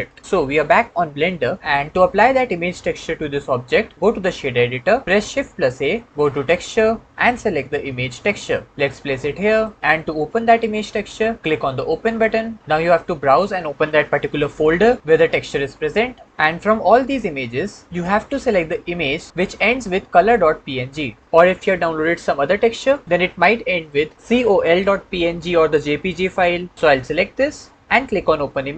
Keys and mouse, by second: 5.5 shift+a, 11.9 click.